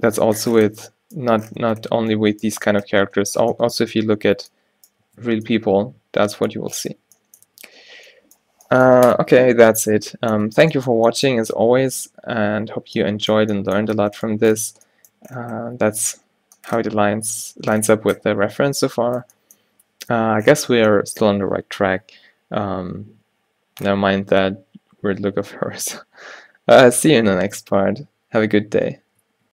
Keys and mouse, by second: 2.1 Tab, 2.8 Tab, 5.2 Tab, 7.2 a, 7.6 a, 9.2-10.2 drag, 10.7 click, 11.1 click, 12.3 shift+c, 16.7 click, 17.9 click, 19.2-23.9 drag, 23.9-29.5 middle drag.